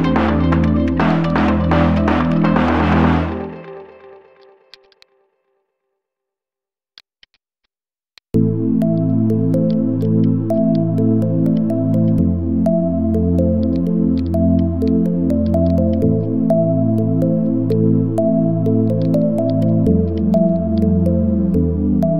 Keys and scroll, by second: 1.2 space, 1.8 v, 4.7 space, 5.0 space, 15.0 ctrl+z, 21.8 ctrl+x.